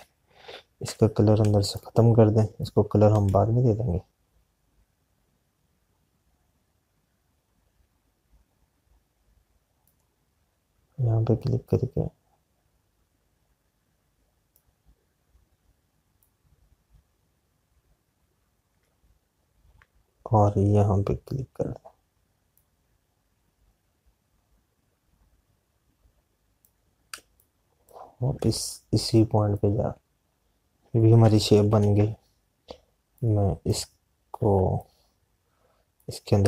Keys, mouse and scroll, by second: 4.1 space, 12.2 click, 17.0 click, 24.6 click, 28.5 space, 33.5 click, 34.1 click, 35.4 z.